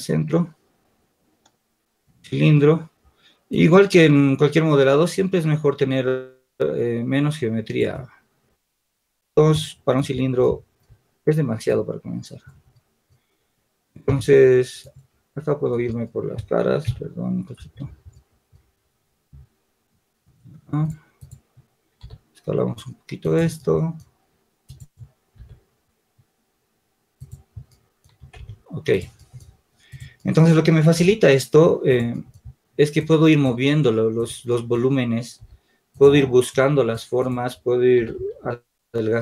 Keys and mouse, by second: 3.7-4.8 drag, 11.4-12.4 drag, 14.0 Tab, 22.0 s, 28.0 Tab, 30.5 click, 30.8 s, 35.4 s.